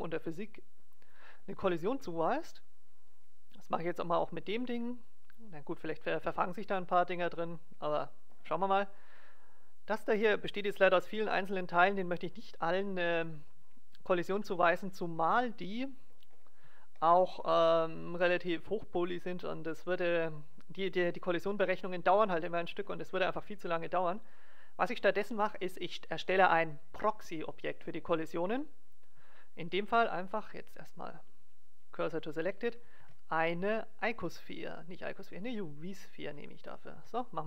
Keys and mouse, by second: 1.1 middle click, 1.4-3.1 drag, 3.1-4.7 right drag, 5.2-6.9 drag, 9.4-13.0 right drag, 13.4-15.2 right drag, 15.2 KP_0, 16.3 middle click, 29.8 shift+s, 32.9 shift+a, 36.9 s.